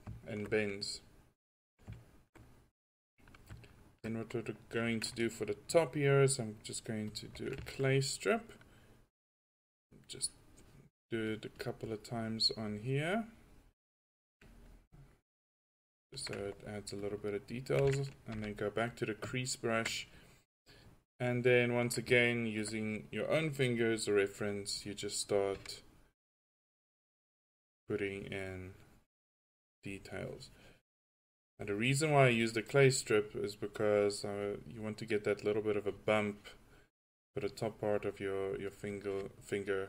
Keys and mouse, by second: 1.4 drag, 9.7-13.5 drag, 13.7 click, 13.8-14.9 middle drag, 18.3 f, 24.8-26.4 drag, 29.9-31.4 drag.